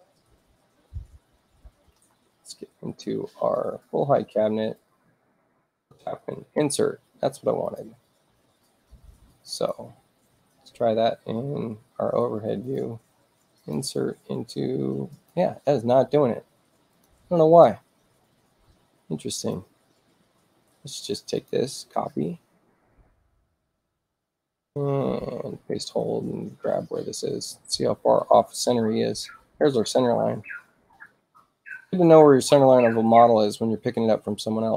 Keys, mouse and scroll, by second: 3.5 click, 4.7 click, 5.6 click, 7.6 click, 9.5 click, 12.5 click, 13.5 click, 15.1 click, 16.3 space, 16.8 click, 19.3 click, 20.9 space, 21.3 click, 21.9 ctrl+alt+c, 22.9 click, 24.5 ctrl+alt+shift+c, 29.5-30.8 ctrl+drag, 33.9 click.